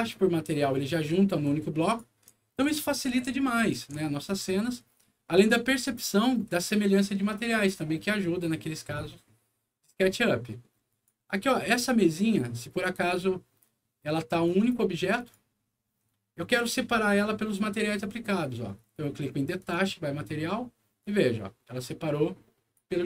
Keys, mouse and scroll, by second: 1.4 click, 2.6 ctrl+z, 4.4 ctrl+middle click, 5.2 ctrl+middle click, 6.2 ctrl+middle click, 7.9 middle click, 9.8 scroll up 1, 10.8 click, 11.3 middle click, 12.3 click, 14.4 click, 15.1 click, 16.8 scroll up 1, 17.2 middle click, 19.5 click, 20.9-22.7 drag.